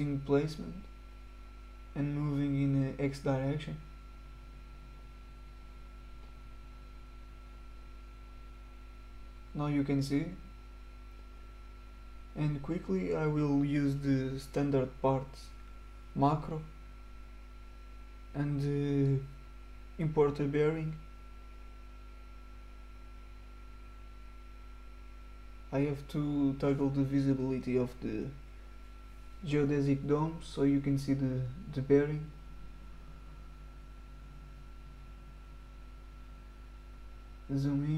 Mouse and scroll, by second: 0.4 middle click, 0.5 right click, 1.5 middle click, 1.7 middle click, 1.9 right click, 2.4 click, 4.8 click, 5.1 click, 5.4 click, 6.6 middle click, 6.7 right click, 7.9 click, 9.2-10.0 middle drag, 9.3-10.1 right drag, 10.3 click, 11.0 middle click, 13.1 click, 17.8 click, 19.1 click, 20.2 click, 21.6 click, 23.4 middle click, 23.6 right click, 25.3 click, 25.7 click, 27.3 click, 28.1 click, 28.6 right click, 32.3 click, 33.5 right click, 34.8 click, 35.6 click, 36.0-37.9 scroll up 5, 37.7 middle drag.